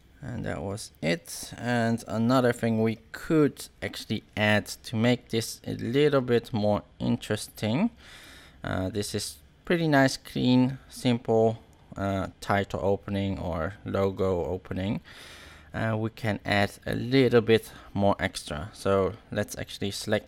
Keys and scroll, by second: 0.7 space, 5.9 space, 7.9 space, 12.2 space, 14.1 space.